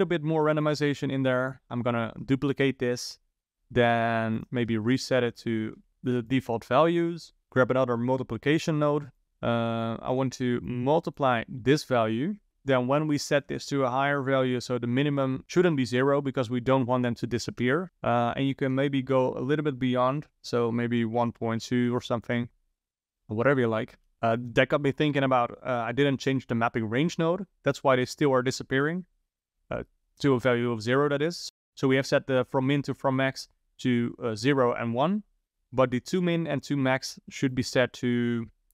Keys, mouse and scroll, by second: 0.7 click, 0.9 shift+d, 1.7-4.4 scroll up 4, 4.4-6.3 drag, 7.5 click, 7.8 shift+d, 9.2 click, 9.8 click, 10.7 click, 12.5 ctrl+z, 13.3-15.4 drag, 18.5-21.6 drag, 22.9 click, 24.0 shift+Left, 24.1 click, 37.4-38.7 drag.